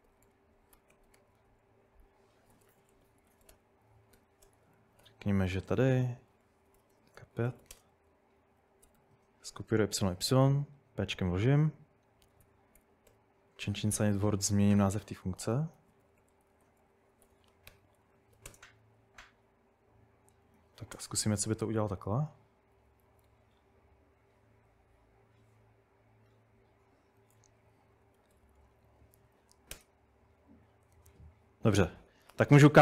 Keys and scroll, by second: 0.0-9.4 typing, 10.5 typing, 12.2-13.1 typing, 14.9-19.0 typing, 20.1-23.6 typing, 21.9 ctrl+n, 27.7 Up, 28.1-29.9 typing.